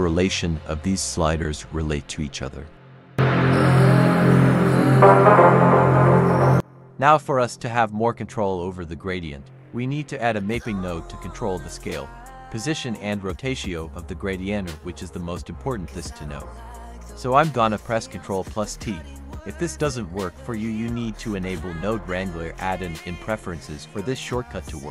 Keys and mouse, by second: 1.0-2.1 drag, 2.4-3.9 drag, 4.1-4.4 drag, 8.6 click, 9.3 middle click, 9.7 click, 11.6-12.3 drag, 12.5 click, 13.7 click, 14.9-15.4 drag, 15.7 click, 16.3 drag, 16.9 click, 20.3 click, 20.8 click, 21.2 click, 23.2 ctrl+t, 24.0 click.